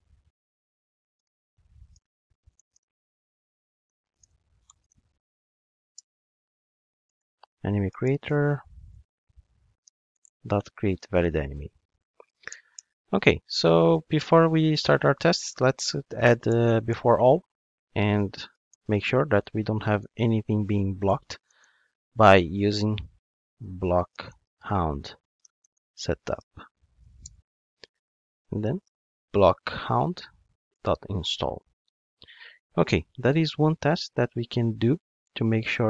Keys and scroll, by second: 3.9 alt+shift+Right, 5.9 alt+Return, 10.5 Return, 16.6 Return, 30.5 Return.